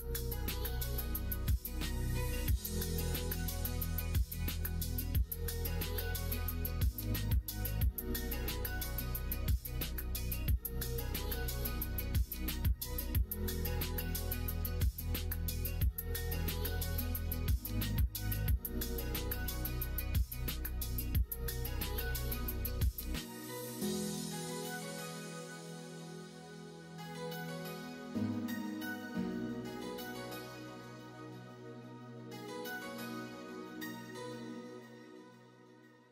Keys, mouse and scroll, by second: 0.5-3.0 middle drag, 3.0 scroll down 1, 3.3 middle click, 3.9 middle click, 4.1 scroll down 1, 5.3 r, 7.7 ctrl+z, 8.6 r, 10.9-12.8 middle drag, 14.1 middle click, 15.2 middle click, 15.5 middle click, 16.7 middle click, 16.8-17.2 scroll down 1, 17.2 middle click, 17.4 scroll down 1, 17.7 middle click, 18.0-18.7 scroll down 1, 18.7 middle click, 18.8 scroll down 1, 19.2 ctrl+r, 27.4 middle click, 28.5 ctrl+r, 30.8 alt+click, 31.2 middle click, 32.4 middle click, 33.5 ctrl+b, 35.7 middle click.